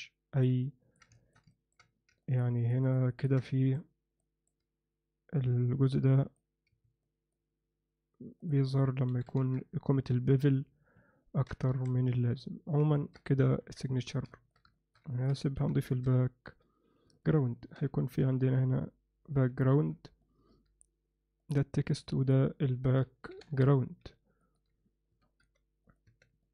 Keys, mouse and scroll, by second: 0.0-0.4 alt+middle drag, 0.7-1.0 ctrl+alt+middle drag, 1.2 alt+shift+middle click, 1.5 ctrl+middle drag, 2.2 ctrl+middle drag, 2.6 ctrl+alt+middle click, 2.9 ctrl+alt+drag, 3.1 ctrl+alt+click, 3.5 middle click, 3.5 alt+click, 3.6 alt+middle click, 4.2 alt+middle click, 6.3 click, 7.1 click, 8.4-10.9 drag, 11.2 ctrl+alt+middle drag, 11.7 alt+a, 12.2-12.7 alt+middle drag, 12.9 ctrl+alt+middle click, 13.6 KP_1, 14.3 ctrl+alt+middle drag, 14.7 alt+shift+middle click, 15.1 ctrl+middle click, 15.6 shift+c, 15.9 shift+a, 17.5 ctrl+alt+middle click, 18.1 s, 19.7 ctrl+alt+middle click, 20.2 middle drag, 21.4 click, 21.9 click, 22.2-24.6 drag, 24.4 ctrl+alt+middle click, 25.1 s, 26.2 Tab, 26.4 alt+middle click.